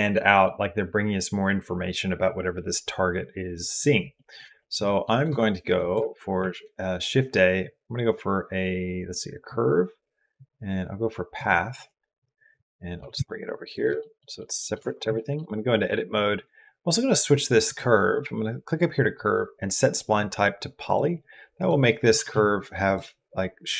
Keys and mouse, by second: 4.0 click, 4.4 shift+click, 4.6 click, 6.2 shift+a, 12.9 g, 13.8 shift+click, 13.9 shift+middle click, 14.2 middle click, 14.8 Tab, 15.0 shift+middle click, 21.6 click, 22.1 g.